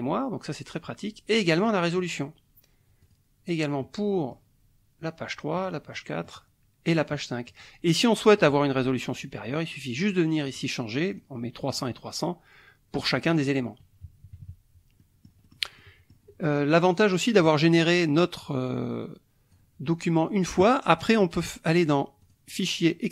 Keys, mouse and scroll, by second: 1.6 click, 2.0 click, 3.0 click, 3.8 middle click, 5.6 click, 5.9 middle click, 6.9 click, 7.5 click, 8.4 click, 9.9 click, 10.4 click, 11.1 click, 11.7 click, 13.0 click, 14.0 KP_Subtract, 15.0 middle click, 15.8 middle click, 15.8 click, 17.4 click, 18.4-19.7 drag, 22.2 click.